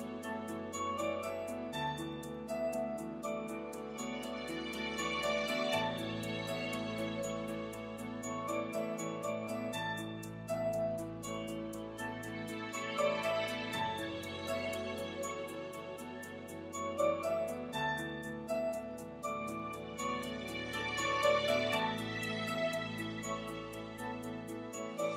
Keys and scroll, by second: 10.5 c, 13.7 alt+super+g, 14.3 super+g, 15.3 alt+g, 18.6 shift+f, 19.0 shift+e, 19.6 e.